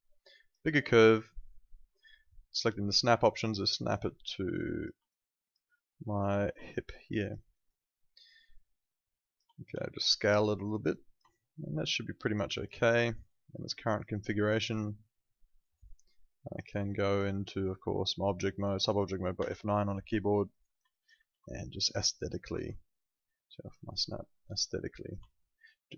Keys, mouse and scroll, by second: 0.7 alt+click, 5.1 alt+click, 6.2 f, 6.6 alt+click, 7.4 alt+right click, 7.7 alt+click, 9.6 r, 10.3 click, 11.3 alt+click, 13.1 alt+click, 17.0 alt+click, 19.4 F9, 20.1 alt+click, 20.9 alt+click, 21.3 w, 21.8 click, 22.5 ctrl+z, 23.6 click, 25.3 alt+click.